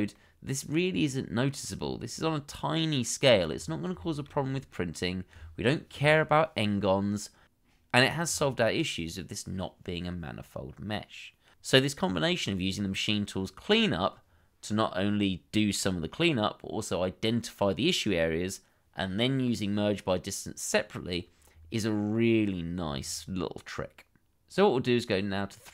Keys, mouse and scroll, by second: 0.0 middle click, 1.9-2.2 scroll down 1, 2.2 middle click, 3.4 scroll down 1, 3.6 middle click, 4.6-4.9 scroll up 1, 5.2-6.7 scroll up 1, 8.0 middle click, 8.9-9.2 scroll down 1, 9.4 shift+middle click, 21.5-22.6 scroll down 1, 23.0-24.9 scroll up 1, 25.1 shift+middle click.